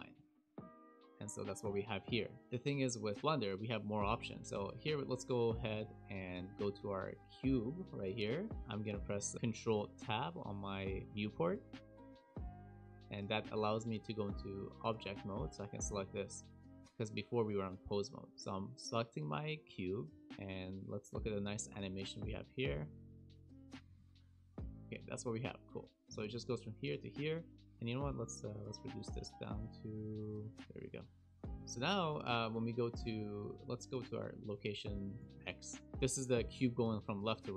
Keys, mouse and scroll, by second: 2.0 t, 4.4-5.0 scroll down 4, 5.0 shift+middle click, 6.0 shift+middle click, 6.4 middle click, 6.8-7.5 scroll up 5, 7.6 shift+middle click, 12.6 ctrl+Tab, 15.3 click, 16.8 click, 18.2 middle click, 18.3-18.7 scroll down 2, 18.9 shift+middle click, 19.4 middle click, 20.3 a, 21.6 click, 23.7 space, 24.9 space, 25.1 click, 28.6 click, 31.5 middle click, 31.5 KP_Decimal, 32.2 a, 34.1 click, 34.3 click, 35.1 KP_Decimal, 35.7-36.3 scroll down 7, 36.4 shift+middle click.